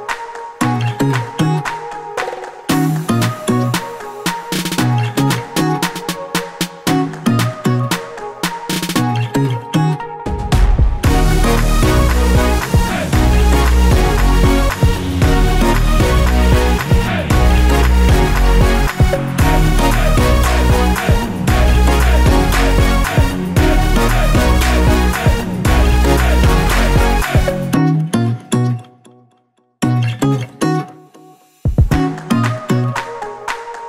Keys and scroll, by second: 2.0 v, 11.0 Return, 16.4 ctrl+z, 17.1 F7, 30.8 Return.